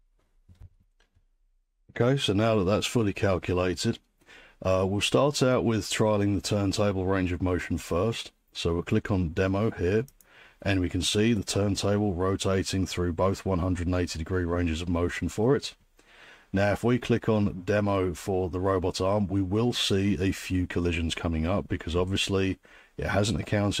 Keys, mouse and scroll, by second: 0.6 alt+3, 10.2-15.3 drag.